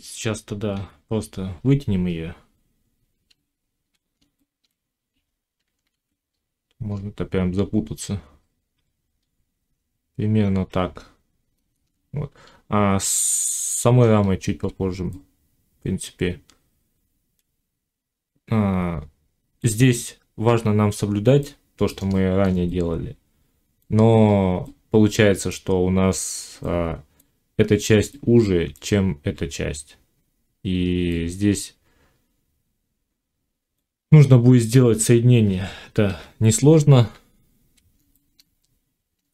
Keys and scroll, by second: 0.5 1, 3.1 z, 5.7 alt+s, 35.9 1.